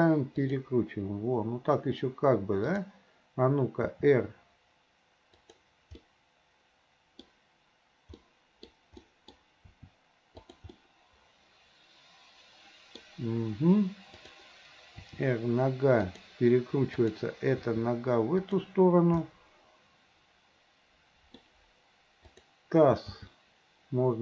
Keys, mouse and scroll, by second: 2.7 click, 3.9 r, 6.1-7.2 middle drag, 8.2-8.7 middle drag, 8.7 scroll down 1, 9.0 middle drag, 9.7 r, 10.8-13.1 middle drag, 14.2 click, 15.0 r, 17.0 click, 17.7 r, 19.3-21.5 middle drag, 22.3 click, 23.1 g.